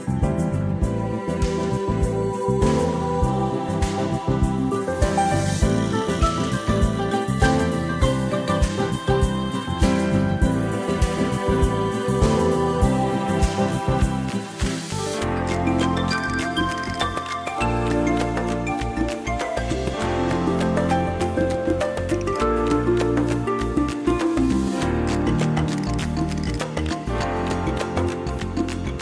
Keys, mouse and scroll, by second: 1.6 click, 9.3 ctrl+shift+click, 11.1 click, 16.1 ctrl+scroll up 1, 16.2 ctrl+scroll down 1, 17.2 click, 19.0 shift+click, 20.4 click, 23.8 shift+click, 24.6 shift+click, 25.5 shift+click, 27.4 click, 28.5 shift+click.